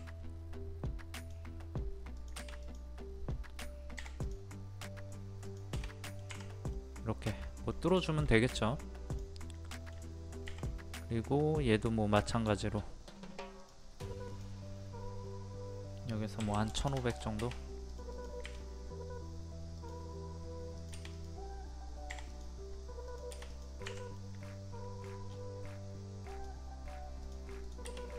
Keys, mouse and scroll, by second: 1.1-3.7 drag, 4.0 p, 4.2 click, 6.0 middle click, 6.3 Escape, 6.7-7.7 middle drag, 7.7 scroll down 1, 8.0 shift+middle click, 9.1 click, 9.5-10.7 middle drag, 10.7 typing, 12.1 click, 16.4 KP_1, 17.9 click, 23.8 Escape, 24.2 middle click, 25.0 scroll down 1, 26.3 click, 28.0-28.1 middle drag.